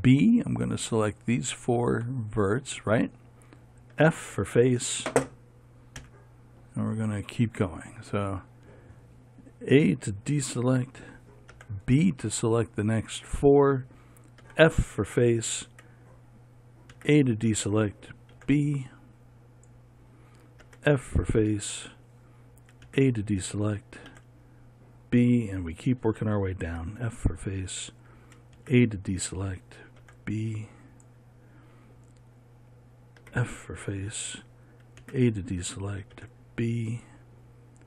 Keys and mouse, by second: 0.0 b, 4.5 f, 6.6 KP_1, 11.2 a, 12.1 b, 15.0 f, 17.5 a, 18.9 b, 21.2 f, 23.4 a, 24.7 b, 27.2 f, 29.1 a, 30.6 b, 33.8 f, 35.6 a, 36.7 b.